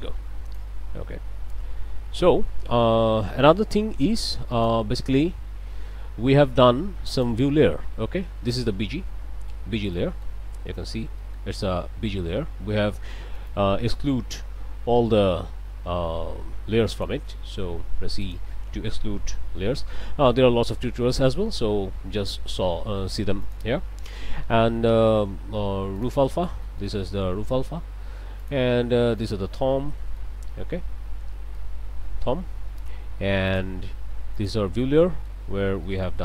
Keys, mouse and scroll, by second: 1.0 z, 3.5-4.9 drag, 7.1 click, 8.5 click, 9.9 middle click, 10.4-11.1 scroll down 2, 11.2 middle click, 13.7 click, 16.9 click, 18.2 click, 19.5 e, 21.1 alt+a, 23.4 click, 26.0 click, 26.6 click, 26.8 middle click, 28.4 click, 29.2 click, 29.9 middle click, 30.4-30.8 scroll up 1, 30.8 click, 31.2 click, 31.6 middle click, 33.5 click, 34.4 click, 35.0 middle click, 35.8 click.